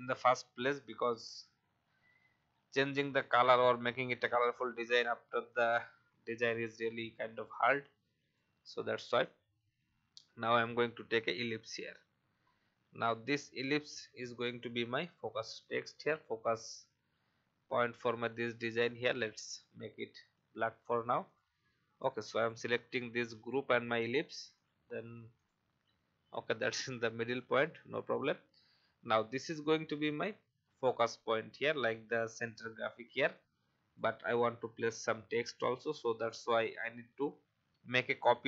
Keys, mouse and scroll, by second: 6.2 alt+scroll up 1, 7.8-9.1 drag, 10.4-14.1 alt+shift+drag, 15.5-16.0 typing, 18.7 click, 19.5-20.2 scroll up 1, 20.2-27.8 drag, 28.0-28.5 alt+scroll down 1, 32.4 click, 33.3 shift+click, 36.7 alt+scroll up 1.